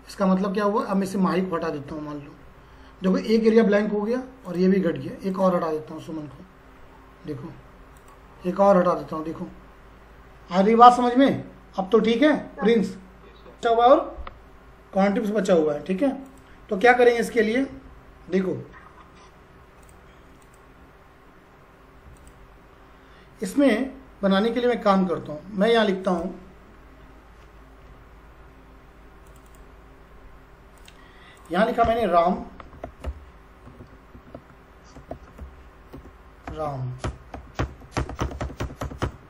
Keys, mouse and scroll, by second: 0.8 click, 3.5 click, 8.0 click, 13.6 click, 16.3 click, 17.4-19.1 scroll up 1, 19.8 click, 21.0-21.5 scroll down 1, 21.5-22.2 scroll up 1, 22.2 click, 26.0 click, 29.3 click, 32.4-33.5 typing, 34.7-38.9 typing, 35.9 Return, 37.6 Return, 38.0 Return, 38.3 Return, 38.8 Return, 39.0 Return.